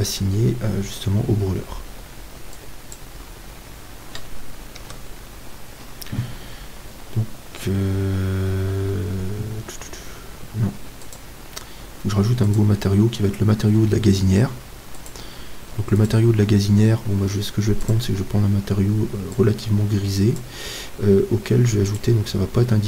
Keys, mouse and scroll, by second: 2.5-4.8 drag, 4.8 Tab, 11.0-14.8 drag, 18.2-20.1 drag, 22.1-22.8 drag.